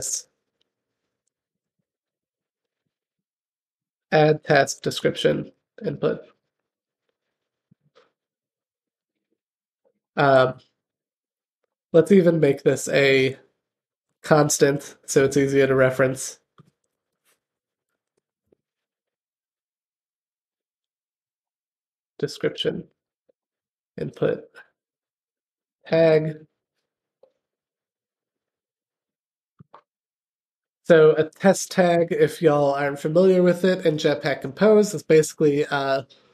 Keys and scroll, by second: 10.6 alt+Return, 13.8 super+x, 26.1 super+v, 31.7 Return.